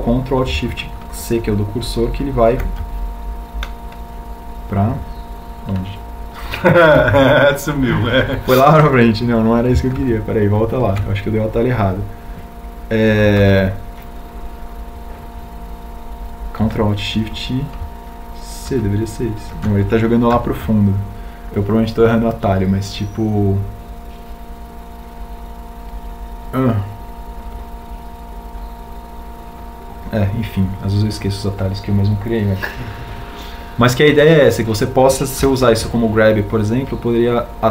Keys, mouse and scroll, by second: 5.0 ctrl+alt+shift+c, 13.6 ctrl+z, 22.0 ctrl+alt+shift+c, 23.9 ctrl+z.